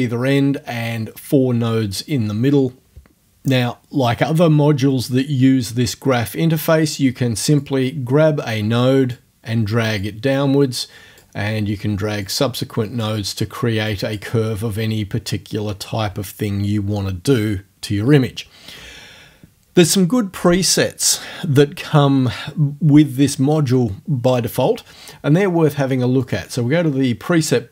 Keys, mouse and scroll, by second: 7.6-9.3 drag, 9.3 middle click, 10.0-11.4 drag, 11.4 middle click, 12.3 click, 13.2 middle click, 13.9 click, 14.3-16.5 middle drag, 26.3 click, 27.4-27.7 middle drag.